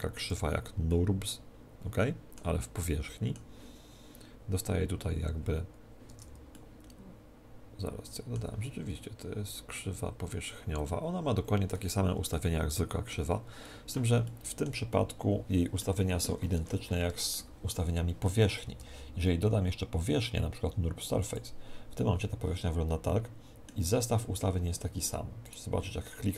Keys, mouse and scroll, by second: 0.9-6.1 middle drag, 6.1 Tab, 6.5-16.5 middle drag, 8.1 right click, 12.3 right click, 16.5 Tab, 17.3-19.9 middle drag, 18.7 shift+a, 21.9-23.7 middle drag, 25.4-26.3 right drag.